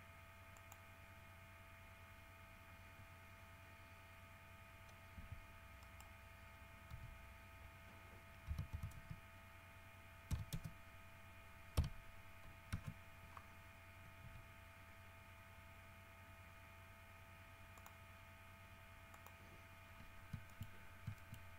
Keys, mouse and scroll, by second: 0.7 middle click, 2.4 scroll up 2, 2.8 scroll down 2, 5.3 Tab, 6.0 right click, 7.1 r, 8.6 KP_Subtract, 8.9 KP_9, 9.1 KP_0, 10.4 KP_9, 10.7 KP_0, 11.9 KP_Subtract, 12.9 KP_Enter, 14.4 g, 17.9 middle click, 18.4 scroll up 1, 19.3 middle click, 20.0-20.5 scroll up 2, 20.6 shift+middle click, 20.8 shift+scroll down 1, 20.9-21.2 shift+scroll up 1, 21.3 shift+middle click.